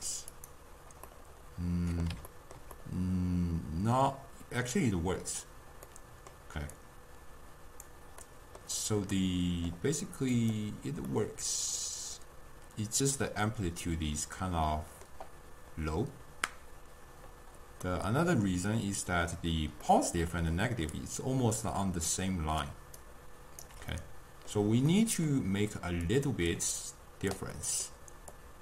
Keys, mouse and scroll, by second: 1.1 scroll up 1, 1.2-2.3 middle drag, 2.3-2.8 scroll up 1, 2.8-5.8 middle drag, 6.0 middle click, 6.8-8.3 drag, 8.3-10.4 middle drag, 10.4-11.2 drag, 11.2-14.2 middle drag, 17.9-20.9 middle drag, 20.9-21.9 d, 22.2 click, 22.6-23.0 d, 23.1 right click, 23.7 d, 24.0-26.2 middle drag, 26.2 click, 26.6 drag, 26.9-27.6 drag, 27.6-28.4 middle drag, 28.4 click.